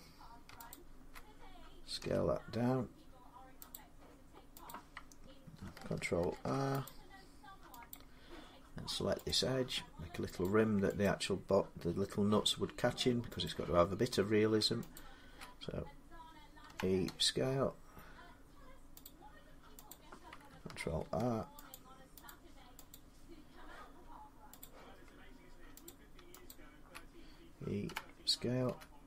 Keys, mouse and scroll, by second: 0.5 alt+click, 1.8 s, 3.5 click, 5.3 click, 5.4 alt+click, 6.1 ctrl+r, 6.7 click, 7.7 click, 9.1 click, 11.1 click, 13.3 click, 14.7 alt+click, 16.5-16.9 typing, 18.8 click, 20.2 click, 20.3 alt+click, 20.8 ctrl+r, 21.5 click, 22.1 click, 22.9 click, 24.4 click, 25.7 click, 26.3 alt+click, 26.7 alt+click, 27.7-28.5 typing.